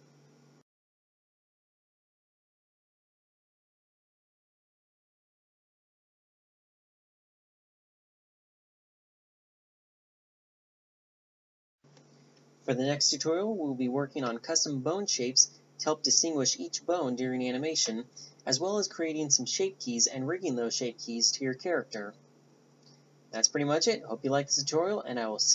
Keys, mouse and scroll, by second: 1.8 click, 2.2 ctrl+p, 3.9 a, 4.8 r, 9.4 g, 14.4 click, 23.4 click.